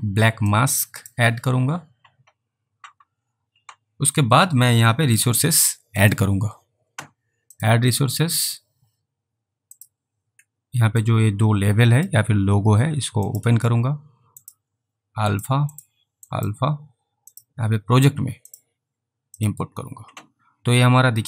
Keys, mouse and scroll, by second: 0.6 click, 6.1 click, 9.8 click, 11.1 click, 13.3 click, 15.4 click, 15.8 double click, 16.4 click.